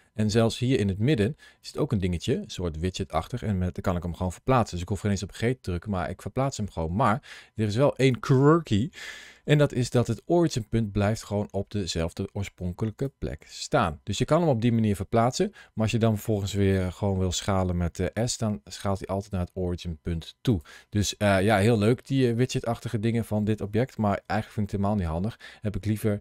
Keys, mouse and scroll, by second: 1.5 click, 9.3 ctrl+shift+a, 14.6 middle click, 16.7 s, 20.3 click, 24.1 ctrl+z, 25.1 middle click.